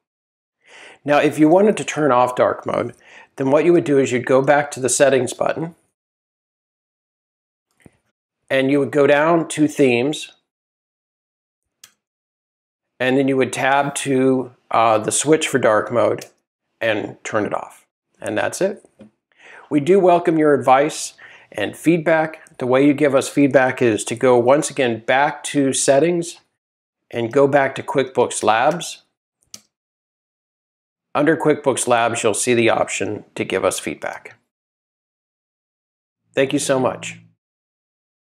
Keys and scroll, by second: 3.7 shift+Tab, 6.3 Tab, 9.4 Tab, 11.8 Return, 13.5 Tab, 27.3 Tab, 29.5 Return.